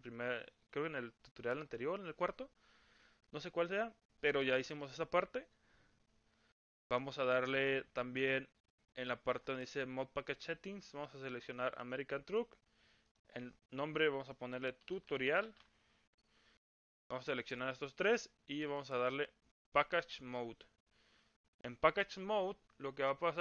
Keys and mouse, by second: 11.0-12.4 drag, 13.2-17.0 drag, 20.3-23.4 drag.